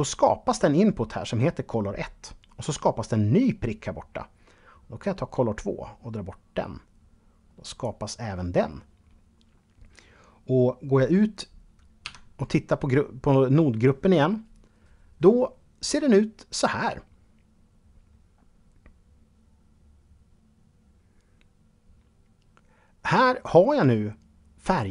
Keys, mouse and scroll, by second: 4.2 click, 11.2 Tab.